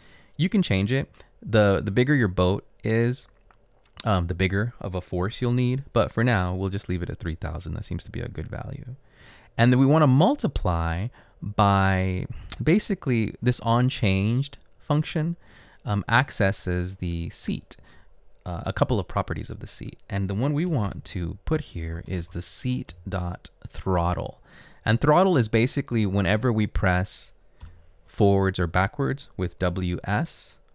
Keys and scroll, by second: 21.5-22.9 typing, 27.7 Return.